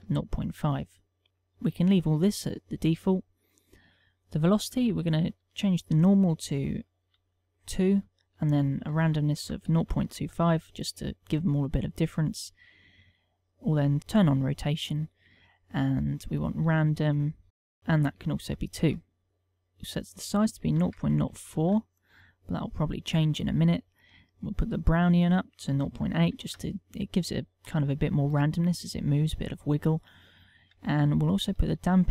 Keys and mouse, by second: 3.1 middle click, 5.8 ctrl+click, 9.3 ctrl+click, 13.3 click, 13.8 middle click, 14.3 click, 15.3 click, 17.7 click, 19.3 middle click, 20.3 ctrl+click, 25.1 click.